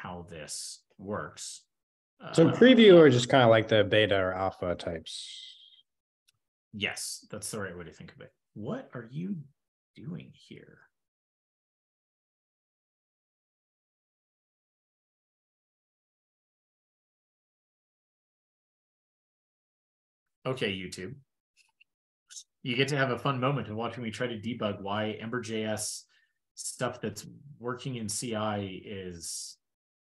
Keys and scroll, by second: 0.4 ctrl+e, 5.6 ctrl+p, 5.8 ctrl+p, 30.0 ctrl+e.